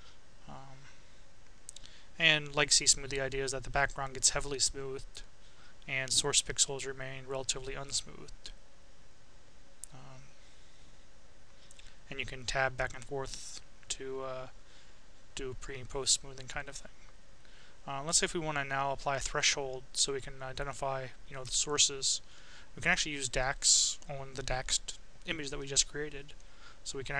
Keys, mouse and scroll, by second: 4.5 click, 5.9 click, 6.7-9.9 right drag, 10.1 Tab, 12.7 Tab, 13.5-15.9 right drag, 16.7-18.1 drag, 19.3 click, 20.7 click, 22.7 click, 23.7-24.9 drag, 25.1 click, 26.7 click.